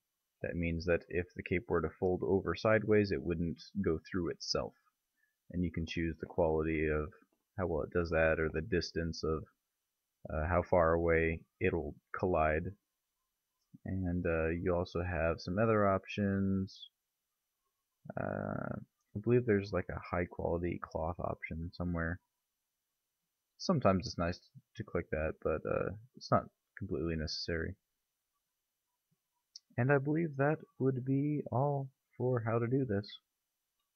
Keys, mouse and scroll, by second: 1.5-2.4 middle drag, 7.2-9.2 middle drag, 15.3-15.8 middle drag, 16.6 click, 20.8-27.5 middle drag, 27.5 click, 29.6 click, 30.6 click, 32.0 click.